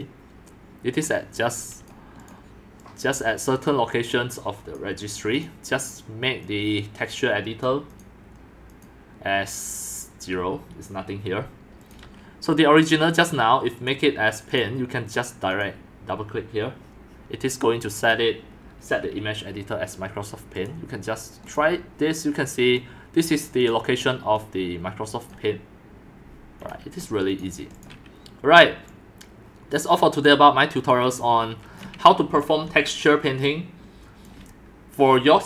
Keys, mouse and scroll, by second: 1.0 click, 2.1 click, 2.8-4.7 drag, 5.4 click, 6.5 click, 8.0 click, 8.9 click, 11.9 click, 13.9 right click, 20.6 right click, 21.2 right click, 21.5 click, 22.9 click, 24.3 click, 27.3 click, 27.8 click, 28.9 click, 30.9 click, 31.8-32.2 scroll, 32.1-34.4 typing, 32.9 scroll down 6, 34.2 click.